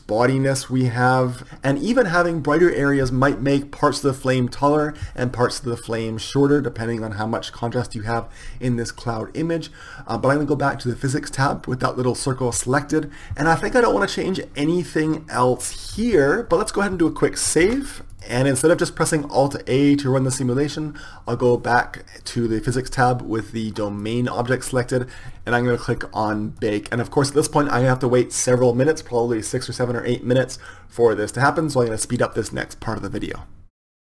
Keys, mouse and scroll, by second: 0.4-1.4 drag, 12.3 click, 13.2 ctrl+s, 17.6 ctrl+s, 24.0-25.2 right drag, 25.2 ctrl+s, 26.5-33.8 drag, 33.6 KP_0.